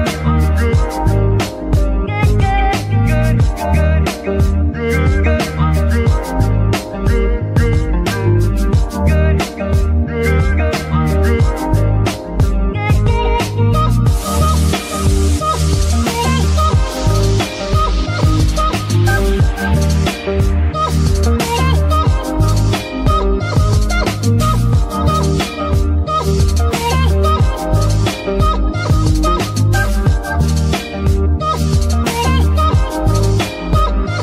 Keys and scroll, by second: 8.4 space, 9.7 ctrl+Tab, 10.3 g, 10.7 Escape, 11.0 r, 11.5 Escape, 16.6 shift+z, 17.2 z, 18.7 alt+z, 32.8 KP_Decimal.